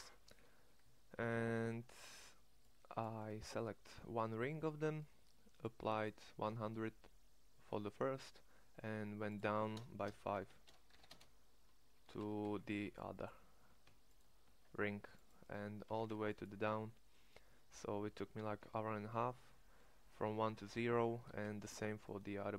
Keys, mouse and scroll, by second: 1.2 c, 10.8 KP_9, 12.2 a, 12.4 c, 15.8 c, 19.5 middle click, 21.6 ctrl+Tab.